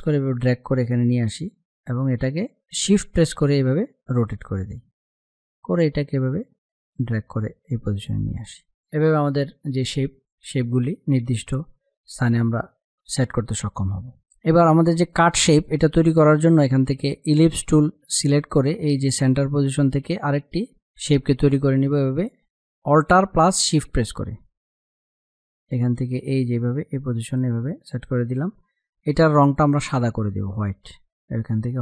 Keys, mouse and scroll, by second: 0.0-3.1 alt+drag, 3.1-8.3 shift+drag, 8.3 space, 8.5 click, 8.7 space, 9.7 click, 9.9 space, 13.8 click, 19.6-31.6 drag.